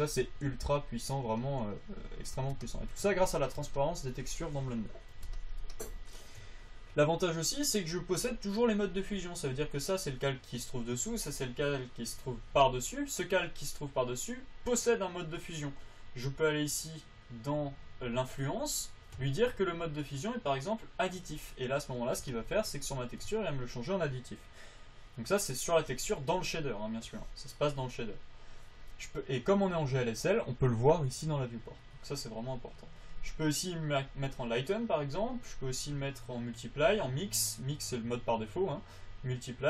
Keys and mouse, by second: 0.8 f, 8.5-10.5 drag, 38.0-39.6 drag.